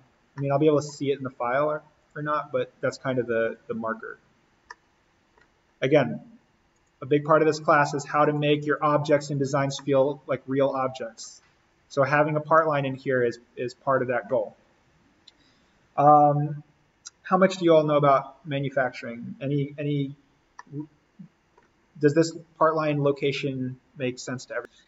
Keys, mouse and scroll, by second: 0.2 scroll down 1, 0.4-2.0 middle drag, 2.0 click, 4.2 scroll up 1, 4.7 middle click, 5.6-6.0 scroll up 1, 6.7 click, 9.1-9.4 scroll up 1, 9.4-9.8 scroll down 1, 9.8-11.5 middle drag, 11.5-12.5 scroll down 1, 12.5 scroll up 1, 12.6 middle click, 12.7 scroll, 14.7-16.6 scroll up 1, 20.6 middle click, 20.7 scroll, 21.5-21.9 scroll up 1, 24.6 click.